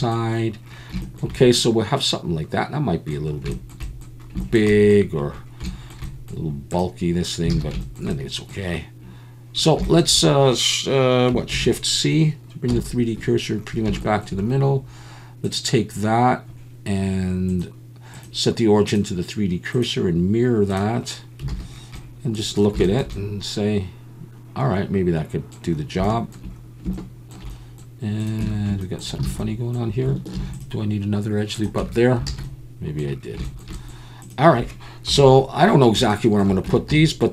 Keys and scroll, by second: 1.2 alt+n, 7.5 alt+a, 11.5 shift+c, 12.7 KP_7, 21.5 alt+a, 28.4 Tab, 29.2 alt+a, 30.4 ctrl+r, 31.8 Tab, 32.3 alt+a, 35.1 KP_7, 36.7 Tab, 36.9 a.